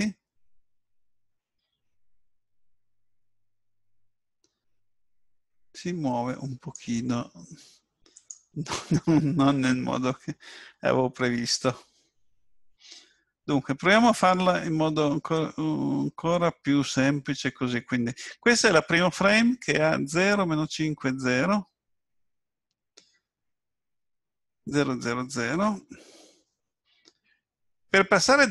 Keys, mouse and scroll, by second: 8.1 click.